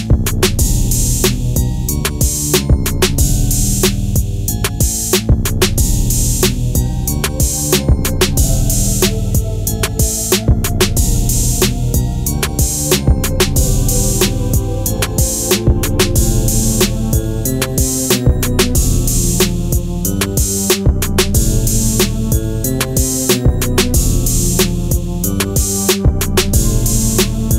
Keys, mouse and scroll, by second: 0.1 click, 0.2 space, 0.3 click, 4.3-8.6 drag, 9.2-10.6 drag, 12.3 shift+click, 13.4 alt+scroll down 2, 13.7 click, 15.2 shift+click, 15.7 click, 16.2 ctrl+z, 16.5 alt+scroll down 2, 16.7 click, 17.5 shift+click, 18.3 ctrl+g, 18.4 click, 19.8-27.5 drag, 25.1-27.0 drag.